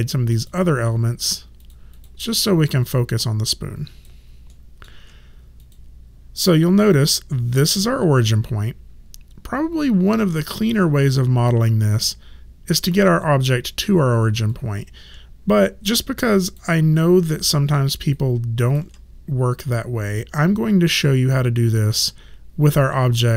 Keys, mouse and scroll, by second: 2.8 alt+click, 4.5 alt+middle click, 5.6 click, 14.5 alt+click, 17.0 alt+middle click, 18.1 alt+right click.